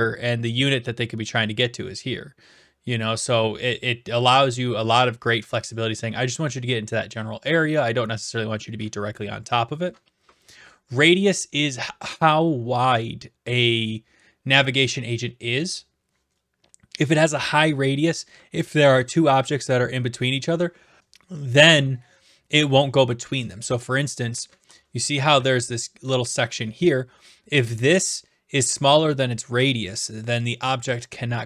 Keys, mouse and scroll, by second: 5.0-6.1 drag, 23.5-24.7 drag, 24.9-26.5 typing, 26.0-27.1 right drag.